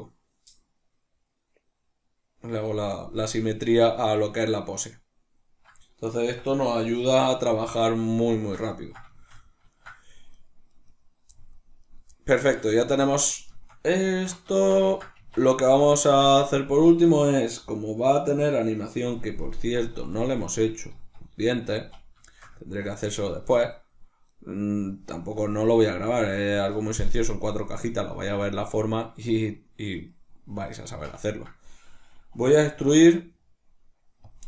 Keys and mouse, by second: 6.2-10.2 middle drag, 6.2 a, 10.2 right click, 10.6 right click, 10.8 right click, 11.8 right click, 12.4-14.5 shift+middle drag, 14.0 alt+q, 15.1 Tab, 15.6 shift+middle click, 19.8 z, 22.5-30.0 ctrl+middle drag, 30.0 right click, 30.8-34.2 shift+middle drag, 32.6 e, 34.2 click.